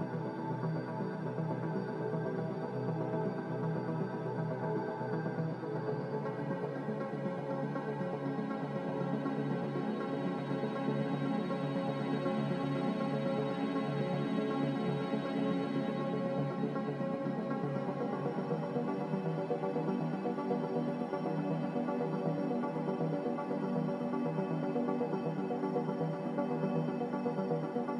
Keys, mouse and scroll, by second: 0.4 2, 0.6 Return, 1.6 5, 1.7 Return, 3.5 x, 4.6 z, 5.3 x, 8.3 z, 12.0 a, 25.1 m.